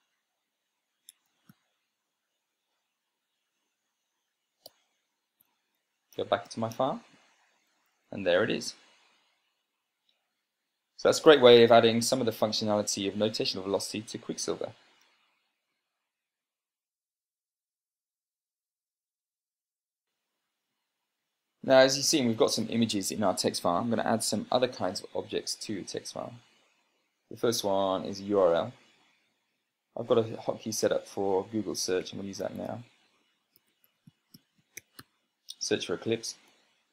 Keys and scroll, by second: 0.3 Tab, 1.7-2.7 typing, 5.3 Return, 7.2 ctrl+p, 8.5 Down, 8.7 Down, 16.5 super+space, 32.8 ctrl+shift+g, 33.7-35.8 typing, 36.7 Return.